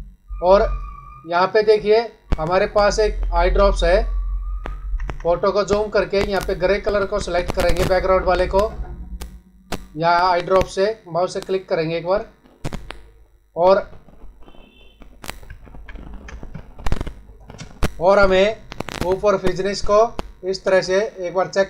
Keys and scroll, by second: 4.7 ctrl+=, 15.5 ctrl+-, 16.4 space.